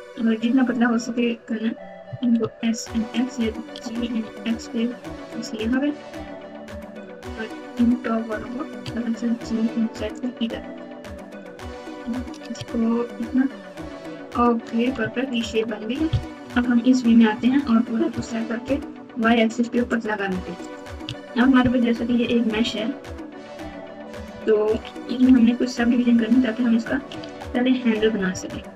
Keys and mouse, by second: 2.0 s, 3.7 g, 7.0 click, 7.2 click, 8.3 g, 10.9 click, 12.0 g, 14.9 Tab, 15.4 Tab, 16.4 KP_3, 17.3 Tab, 18.1 s, 21.0 Tab, 21.8-23.5 typing, 24.3 KP_Subtract, 24.7 KP_Subtract, 24.8 KP_Subtract, 25.7 KP_Subtract, 25.9 KP_Subtract, 26.0 KP_Subtract, 27.1 alt+z, 27.9 KP_2, 28.1 KP_2, 28.2 KP_2, 28.4 KP_2.